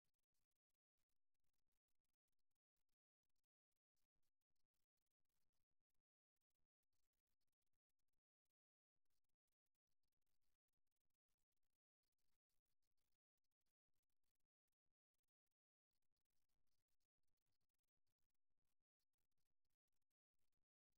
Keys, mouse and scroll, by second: 4.4-6.2 drag, 7.4 a, 8.1 a, 8.4 a, 9.5-11.7 right drag, 12.2-14.4 middle drag, 14.4 KP_3, 15.8-18.5 middle drag, 20.0 g.